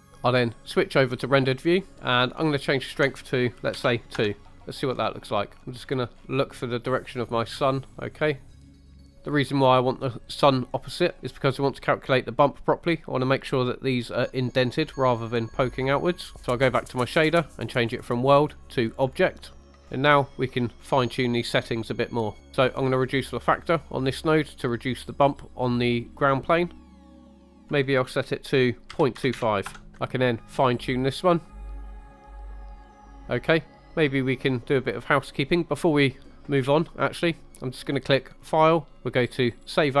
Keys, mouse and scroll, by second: 1.2 click, 2.7-4.2 drag, 5.6 shift+middle click, 5.8-6.4 scroll down 4, 6.6-8.6 middle drag, 8.5 scroll up 4, 8.7 middle click, 8.9 shift+middle click, 9.1 scroll up 2, 17.9-18.9 drag, 19.6 scroll down 4, 19.7 middle click, 19.8 scroll up 2, 20.2 middle click, 20.8 scroll up 3, 21.2 middle click, 21.8-22.4 scroll up 1, 22.4 scroll down 2, 23.7-27.5 drag, 27.6-29.7 drag, 30.7 click, 32.3 scroll down 2, 32.5 middle click, 32.6 scroll up 2, 32.7 middle click, 32.8 middle click, 33.0 shift+middle click, 33.1 middle click, 33.5-33.9 scroll down 3, 33.9 middle click, 34.8 middle click, 38.3-40.0 drag.